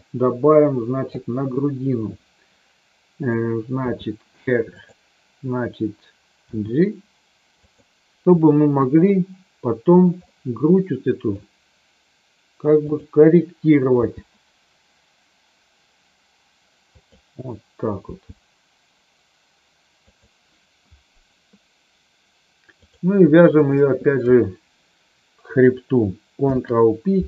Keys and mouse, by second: 3.8 r, 4.7 click, 6.4 g, 7.6 click, 8.8 KP_1, 10.2-11.3 middle drag, 12.9 click, 13.8 g, 16.9 click, 17.9 g, 20.1 click, 22.8 click, 23.6 shift+click, 26.3 ctrl+p.